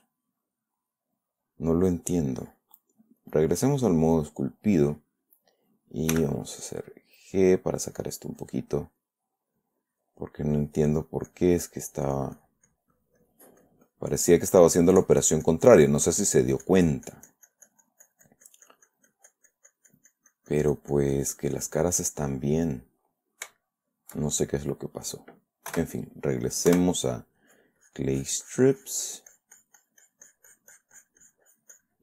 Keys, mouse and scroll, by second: 3.6 click, 4.5 click, 6.5 g, 7.1-8.5 drag, 8.8 click, 9.9 click, 10.8 click, 11.3 click, 11.7 click, 12.4-13.9 drag, 14.0 click, 14.9-22.4 drag, 22.5-23.8 middle drag, 24.0 shift+click, 25.0 click, 26.1 4, 27.1 3, 27.8-32.0 drag.